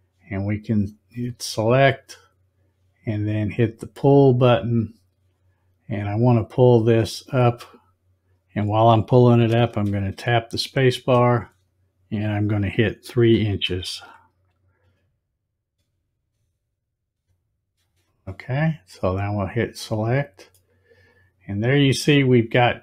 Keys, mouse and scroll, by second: 0.7 click, 2.0 click, 4.6 click, 7.2-11.0 drag, 10.9 space, 19.2 click, 20.5-22.8 middle drag.